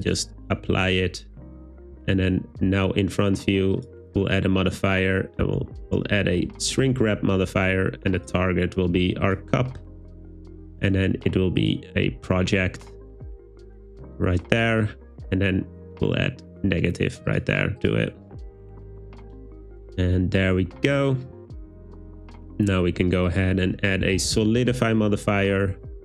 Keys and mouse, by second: 3.9-6.5 drag, 10.9-11.7 drag, 17.3 click, 23.4-24.6 drag.